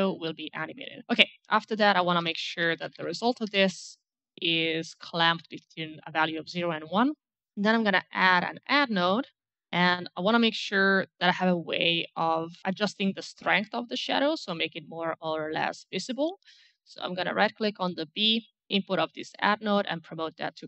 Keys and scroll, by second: 1.5-3.3 typing, 3.5 Return, 7.5 a.